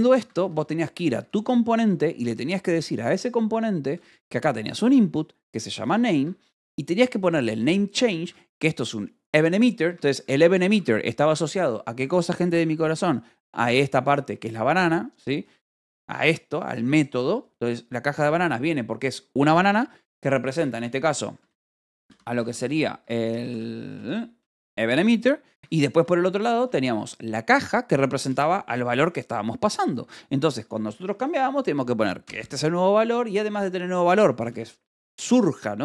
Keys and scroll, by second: 0.1 j, 0.9 k, 1.4 j, 1.8 Escape, 2.5 j, 4.3-11.3 typing, 4.9 Escape, 6.1 Escape, 8.1 Escape, 12.4 h, 20.6 e, 21.3 f, 22.9 Escape, 23.2-24.9 typing, 25.4 Escape, 26.3 k, 28.7 shift+v, 29.9 Escape, 30.3-31.3 typing, 32.6 shift+v, 32.9 Escape, 33.2 j, 34.0 k, 34.8 shift+v.